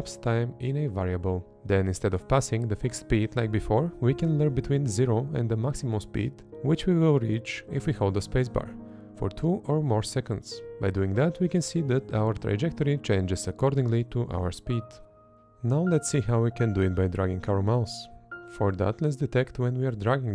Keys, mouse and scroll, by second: 1.2 Left, 1.6 space, 3.1 Up, 7.3 space, 8.6 Up, 9.0 space, 10.9 Up, 11.6 space, 12.2 Up, 12.8 space, 14.1 Up, 14.8 space, 15.4 click, 16.8 click.